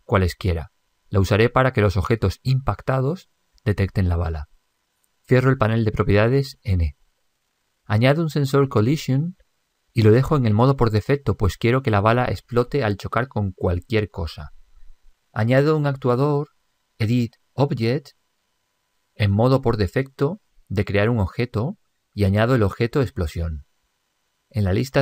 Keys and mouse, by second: 6.6 n, 9.6 click, 16.2 click, 20.7-22.3 middle drag, 22.9 click.